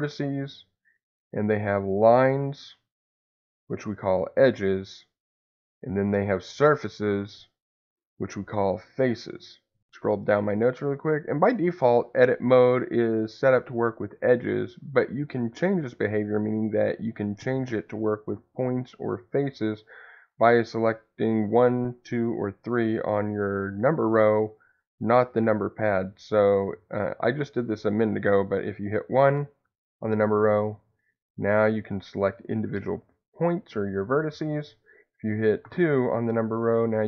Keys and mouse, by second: 2.2 click, 2.9 click, 3.6 click, 6.2 click, 7.6 click, 31.2 click, 32.1 click, 36.2 click.